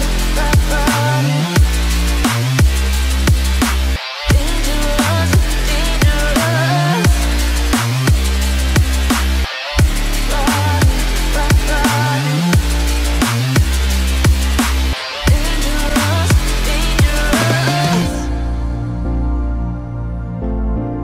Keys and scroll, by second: 20.5 ctrl+s.